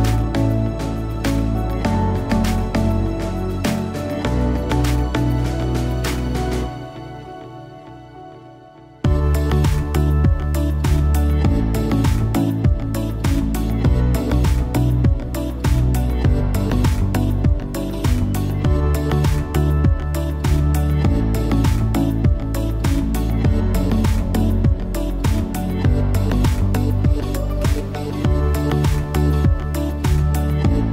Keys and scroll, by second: 25.9 super+[, 28.5 super+[.